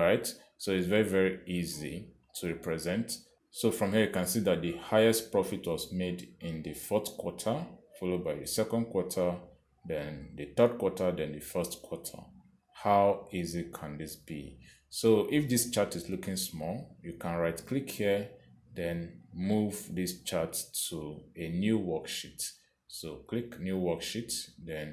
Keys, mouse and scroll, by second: 18.7 right click, 22.2 click, 24.6 click.